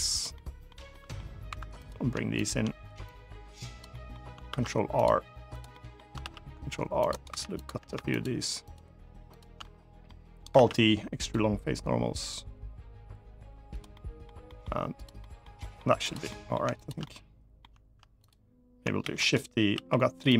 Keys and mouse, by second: 0.1 middle click, 0.6 middle click, 1.2 2, 2.1 shift+click, 2.8 click, 3.6 middle click, 4.2 ctrl+r, 5.2 click, 5.4 middle click, 5.9 ctrl+r, 6.8 click, 7.0 3, 7.9 alt+shift+click, 9.0 alt+shift+click, 9.3 middle click, 10.4 alt+e, 13.4 click, 13.6 middle click, 14.2 middle click, 14.7 click, 14.9 middle click, 15.3 middle click, 16.0 middle click, 16.5 shift+click, 16.7 middle click, 17.9 click, 18.7 shift+d, 19.0 click, 19.4 s, 20.0 click.